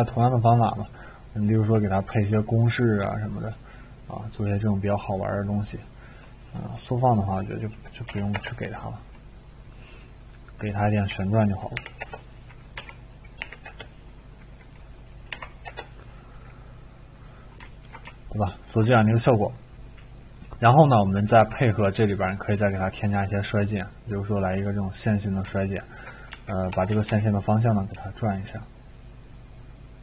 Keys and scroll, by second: 8.1 0, 8.3 Return, 11.1 2, 11.7 0, 12.0 Return, 12.7 3, 13.7 Return, 13.7 0, 15.3 6, 15.7 Return, 21.7 typing, 26.3 r, 26.9 r, 27.1 r.